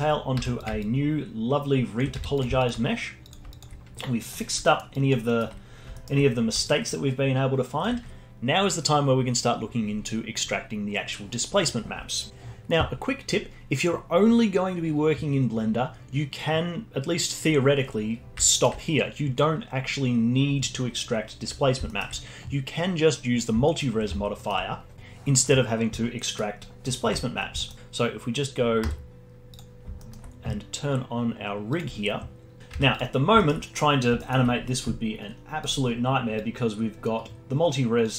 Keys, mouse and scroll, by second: 0.4 z, 0.8-2.1 alt+drag, 2.1 z, 2.6 alt+click, 3.5-4.3 alt+drag, 4.3 scroll up 1, 4.6 alt+middle drag, 4.9-5.3 alt+drag, 5.3-5.6 alt+middle drag, 5.6 scroll up 2, 5.9-6.3 alt+middle drag, 6.3 scroll down 2, 6.6-9.8 alt+drag, 10.8-12.3 scroll down 1, 15.1-18.5 scroll up 3, 18.5 middle click, 21.8-24.9 alt+middle drag, 26.2 middle click, 27.6-28.8 alt+middle drag, 28.8 z, 30.0-31.7 alt+middle drag, 31.7 click, 32.6 alt+middle click, 32.7 Tab, 33.4-35.6 alt+middle drag, 35.6 click.